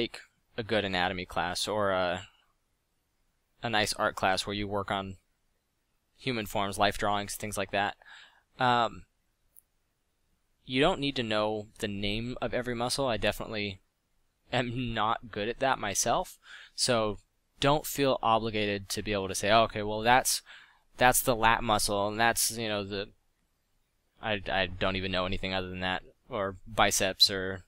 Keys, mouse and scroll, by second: 0.9 f, 5.6 f, 13.4 f, 19.0 f, 21.4 f, 23.4 f, 23.8 f, 25.6 ctrl+z.